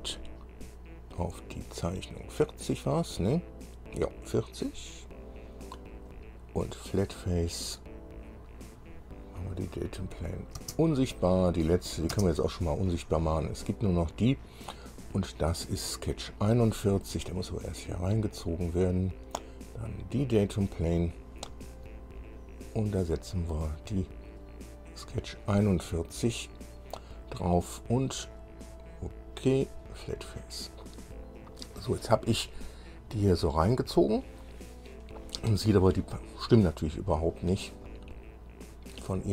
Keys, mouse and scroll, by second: 4.8 click, 6.3 click, 7.8 click, 9.8 click, 10.4 click, 10.8 space, 11.4 click, 12.3 space, 13.5 click, 14.4 click, 15.1 scroll down 1, 16.5-18.7 drag, 19.1 scroll down 1, 20.1 click, 22.4 click, 23.8 click, 26.6 click, 28.5 click, 30.0 click, 32.5-34.8 middle drag, 35.7-36.1 scroll up 2, 38.0-39.3 middle drag.